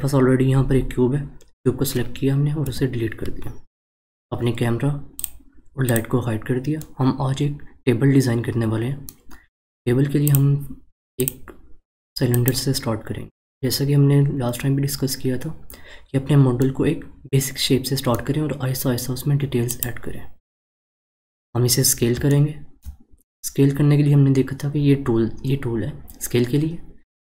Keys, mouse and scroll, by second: 2.6 Delete, 5.2 click, 5.8 click, 6.8-9.8 middle drag, 10.2-13.2 drag, 16.5-19.7 middle drag, 19.7 click, 21.0-22.3 scroll down 1, 22.3-23.1 shift+middle drag, 23.1 scroll down 1.